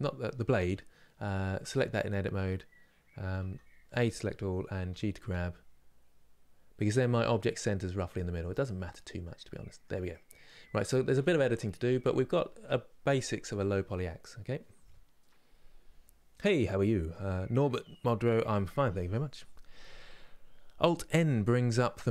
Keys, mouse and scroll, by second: 1.4 Tab, 3.0 a, 8.1-10.3 middle drag, 10.3 scroll up 2, 10.8 middle click, 11.7-12.2 scroll down 1.